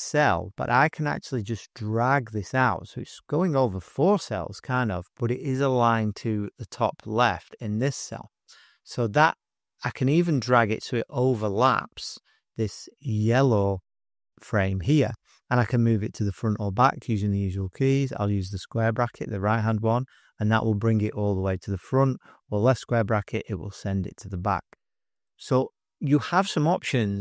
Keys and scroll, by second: 18.5 ], 22.6 [.